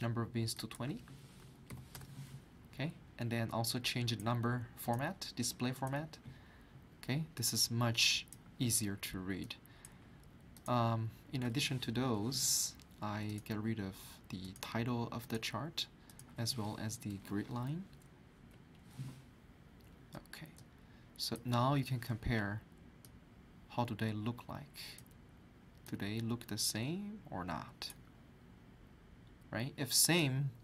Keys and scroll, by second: 1.4 2, 1.7 0, 1.9 Return, 12.0 Delete, 17.7 Escape, 18.5 Delete.